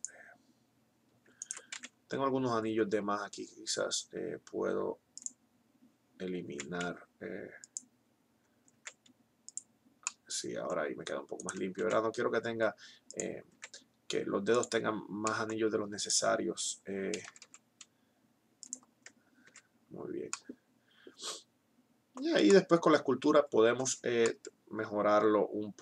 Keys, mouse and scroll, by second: 1.6 x, 6.3 x, 8.8 x, 11.6 x, 13.4 x, 16.8 g, 17.3 right click, 19.4 Tab, 23.6 Tab.